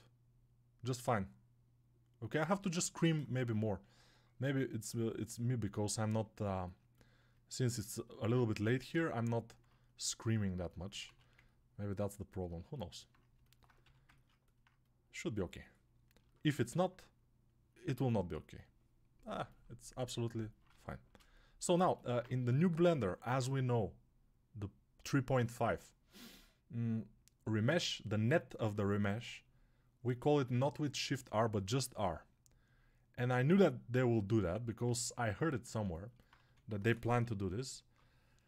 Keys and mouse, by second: 4.0-8.2 alt+right drag, 8.2 ctrl+z, 10.9 1, 13.7 g, 14.1-38.4 ctrl+alt+drag, 31.7 r, 34.7 ctrl+r, 36.3 1, 37.1 [.